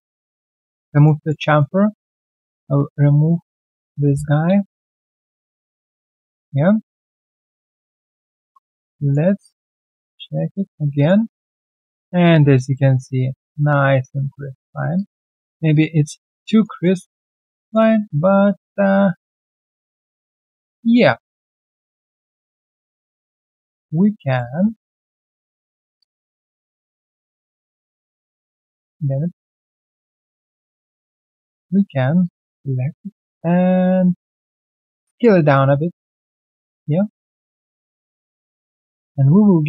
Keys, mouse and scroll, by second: 0.9 alt+click, 1.1 alt+right click, 1.4 alt+middle click, 2.5 double click, 4.9 ctrl+Delete, 6.9 right click, 7.4 alt+click, 7.8 alt+middle click, 8.1 alt+scroll down 1, 8.4 3, 8.8 right click, 9.7 alt+click, 9.9 alt+middle click, 10.4 right click, 14.2 alt+click, 14.3 scroll down 2, 14.6 alt+middle click, 14.9 alt+click, 15.2 alt+middle click, 15.5 alt+right click, 15.7 alt+click, 15.9 alt+right click, 16.2 alt+click, 16.4 alt+middle click, 16.7 alt+right click, 17.3 alt+middle click, 18.1 alt+click, 18.5 right click, 18.8 q, 20.7 double click, 23.1 shift+click, 23.2 shift+double click, 23.5-24.2 shift+scroll down 1, 24.2 shift+click, 24.7 alt+middle click, 25.6 alt+middle click, 25.9 shift+click, 27.0 alt+scroll down 4, 27.3 alt+middle click, 27.7 alt+click, 28.4 right click, 29.5 alt+middle click, 29.9 right click, 30.8 alt+middle click, 31.1 alt+right click, 32.2 shift+click, 34.5 shift+click, 35.0 alt+middle click, 35.2 scroll down 1, 35.3-36.0 typing, 36.0 alt+right click, 38.0 alt+middle click, 38.4 alt+right click, 38.7 alt+right click.